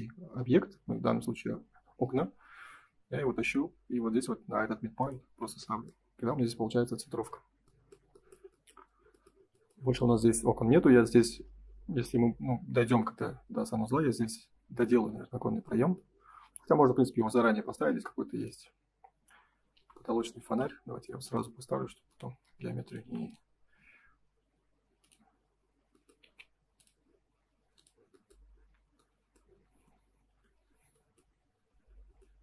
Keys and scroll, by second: 6.0 space, 22.4 space, 23.0 p, 26.2 ctrl+z, 28.4 space, 30.2 ctrl+s.